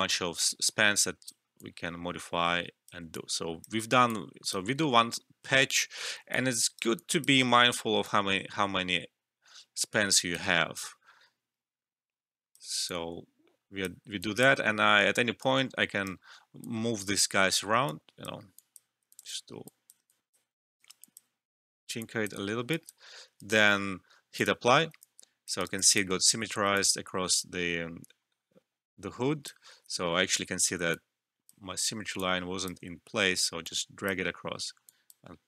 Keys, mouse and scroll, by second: 0.1-3.1 drag, 3.1 alt+click, 3.8 alt+middle click, 4.0-6.3 alt+drag, 6.6 alt+right click, 6.9-12.8 alt+drag, 12.8-14.2 alt+drag, 15.4 right click, 16.6-19.0 drag, 20.0 alt+click, 20.4 alt+middle click, 20.7 alt+right click, 21.0 alt+click, 22.7 alt+click, 23.3 alt+right click, 24.3 click, 25.0 alt+click, 25.6 alt+right click, 25.8 alt+click, 26.7-29.8 alt+drag, 29.8 ctrl+z, 30.9-35.4 drag.